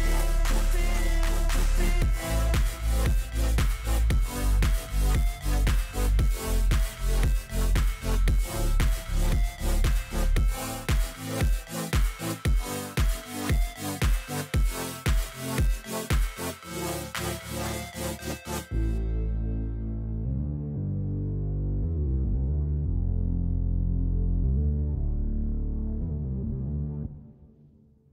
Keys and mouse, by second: 1.4 alt+shift+click, 1.8 alt+shift+click, 2.4 alt+shift+click, 3.9 alt+shift+click, 5.3 click, 7.5-9.0 drag, 10.3 click, 12.0 click, 15.7-17.0 drag, 17.8 click, 19.0 click, 22.9-24.2 drag, 25.4 alt+click, 26.8-27.8 drag.